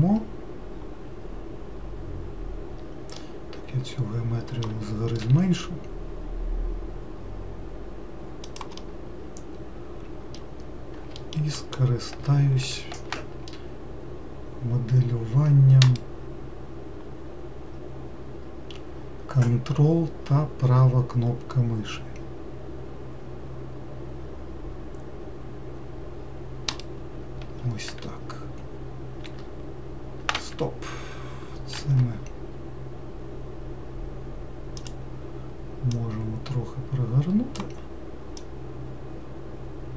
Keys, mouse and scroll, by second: 3.4-5.5 middle drag, 5.5 s, 9.0-11.5 middle drag, 16.1-19.1 ctrl+right drag, 26.9-29.5 ctrl+right drag, 29.5 e, 32.1 r, 36.2 click, 38.7 click.